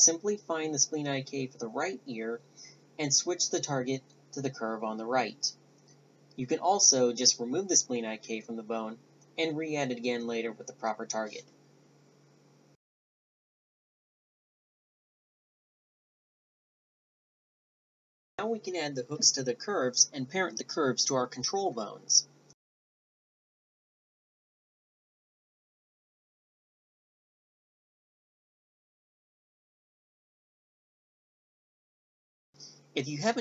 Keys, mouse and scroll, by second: 2.0 click, 2.3 right click, 2.4 Tab, 2.5 a, 2.8 middle click, 3.1 Tab, 3.2 right click, 3.4 click, 3.9 BackSpace, 4.0 BackSpace, 4.4 Tab, 4.5 Tab, 4.5 right click, 4.6 Tab, 4.7 a, 4.8 b, 4.9 right click, 6.5 a, 6.6 click, 7.0 BackSpace, 7.4 BackSpace, 7.8 BackSpace, 8.5 right click, 8.7 click, 8.9 BackSpace, 9.9 middle click, 10.2 right click, 11.3 middle click, 11.9 click, 12.1 click, 12.1 right click, 12.5-13.1 drag, 13.4 click, 14.4 click, 14.6 right click, 14.7 n, 14.8 n, 15.5 ctrl+a, 16.3-17.6 drag, 16.8 Tab, 17.6 Tab, 18.3 Tab, 18.5 a, 19.1 ctrl+h, 20.1 a, 20.2 Tab, 20.6 click, 20.9 Tab, 21.2 a, 21.8 right click, 21.9 ctrl+h, 22.6 a, 22.7 Tab, 23.0 right click, 23.3 a, 23.3 z, 24.1 drag, 24.5 click, 24.9 ctrl+p, 25.4 a, 25.7 right drag, 26.1 right click, 26.2-26.9 drag, 26.2 a, 26.9 click, 27.3 ctrl+p, 28.2 a, 29.5 g, 30.4 click, 30.8-31.4 middle drag, 31.4-32.5 drag, 32.1 g, 32.5-32.9 middle drag.